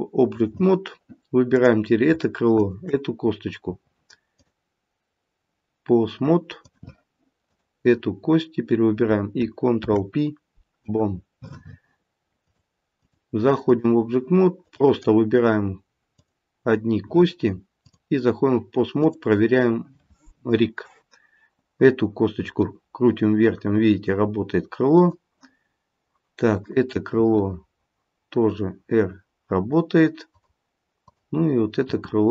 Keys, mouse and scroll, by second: 1.5 click, 2.5 shift+click, 2.8 shift+click, 4.3 click, 9.7 ctrl+p, 12.4 click, 12.9 click, 14.6 click, 16.1 click, 17.7 click, 22.4 r, 26.6 click, 27.5 r, 31.0 click, 31.8 r.